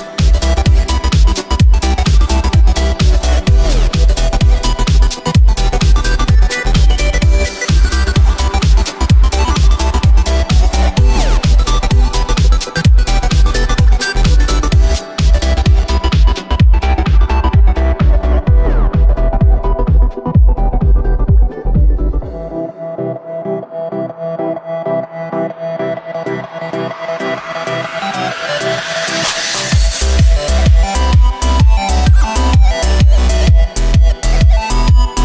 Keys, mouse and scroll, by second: 0.9 s, 4.4 middle click, 5.1 Tab, 6.6 2, 7.2 e, 9.8-11.3 middle drag, 11.3 Tab, 11.5 scroll up 1, 11.5 scroll down 1, 11.6-11.9 scroll up 1, 11.9-12.5 middle drag, 12.5 Tab, 13.5 3, 15.3 a, 16.7 alt+e, 21.8 Tab, 22.1-22.7 middle drag, 22.7 w, 23.8-24.4 scroll down 2, 24.4 right click, 24.8 KP_1, 26.5 s, 28.0-29.0 drag, 29.0 s, 30.9 g, 33.9 s.